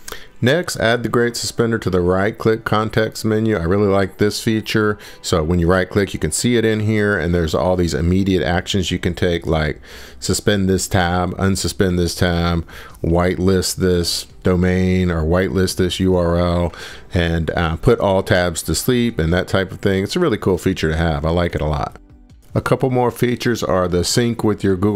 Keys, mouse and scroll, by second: 0.3 scroll, 3.1 scroll, 4.0 right click, 4.2-4.5 scroll, 4.7 scroll, 11.1 click, 13.2 right click, 16.1 click, 16.6 right click, 17.2 right click, 22.0 click, 24.8 click.